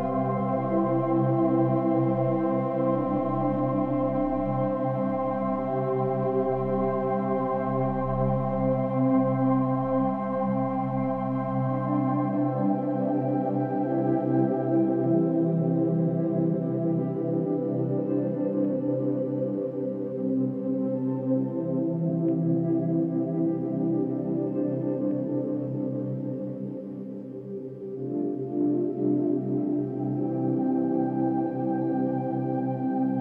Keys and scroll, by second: 1.2 ctrl+-, 1.9 ctrl+=, 17.0 ctrl+-, 17.4 ctrl+=, 18.1 ctrl+-, 18.7 ctrl+-, 19.0 ctrl+-, 20.3 ctrl+=, 20.8 ctrl+t, 21.0 ctrl+-, 21.2 ctrl+=, 21.4 ctrl+-, 22.1 ctrl+h, 23.7 Right, 23.8 Down, 23.9 Right, 24.4 ctrl+-, 26.4 ctrl+t, 26.6 ctrl+h, 26.7 ctrl+t, 27.2 ctrl+h, 27.8 Left, 27.9 Down, 28.1 Right, 30.1 ctrl+=, 30.3 ctrl+-, 30.6 ctrl+t, 31.1 Left, 31.4 Down, 31.6 Up, 32.2 ctrl+t, 33.1 Up.